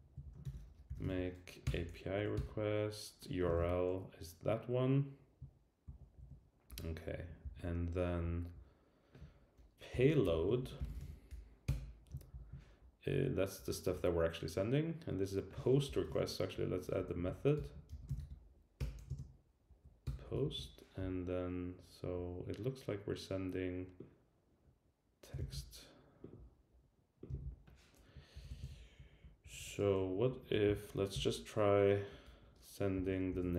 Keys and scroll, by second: 0.2 Down, 0.9 Down, 1.6 Return, 2.1 Right, 2.3 Return, 3.5 super+v, 5.8 super+Left, 6.7 Return, 11.6 Return, 12.3 shift+super+], 15.8 shift+super+[, 16.5 Up, 17.2 super+Right, 17.6 Return, 18.7 Return, 19.0 Right, 19.7 Down, 20.0 Return, 20.4 shift+super+], 25.4 super+c, 28.3 super+v, 28.3 alt+Left, 29.4 alt+shift+Right, 30.6 shift+Left, 33.3 Left.